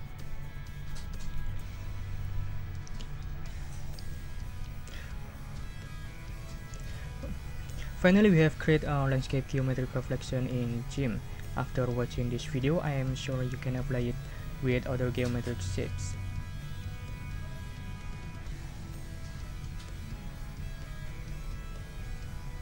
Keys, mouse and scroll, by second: 6.5 click, 16.1 ctrl+scroll up 2, 16.2-17.1 ctrl+scroll down 6, 17.5 ctrl+scroll up 2, 20.5 click, 21.4 click.